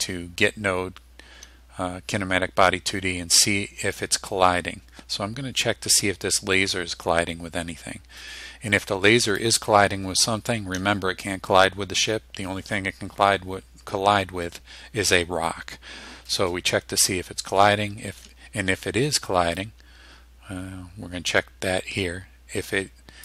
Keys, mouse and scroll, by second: 9.4 click, 19.7-23.2 drag.